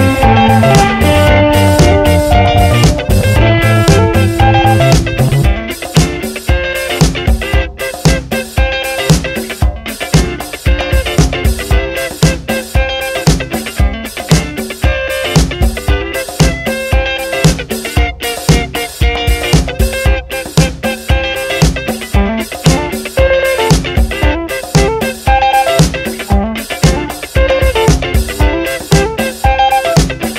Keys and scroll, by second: 4.6 Return, 6.3 t, 13.3 Return, 16.5 ctrl+Return, 17.6 v, 23.9 Return, 28.7 F7, 30.2 t.